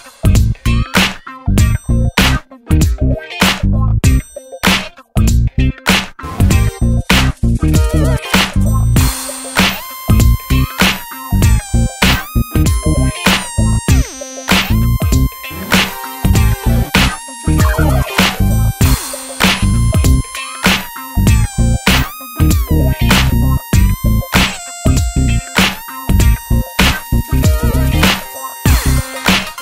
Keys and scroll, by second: 8.1 super+c, 8.4 super+v, 15.7 super+c, 16.0 super+v, 21.1 super+c, 21.4 super+v, 28.7 super+c, 28.9 super+v.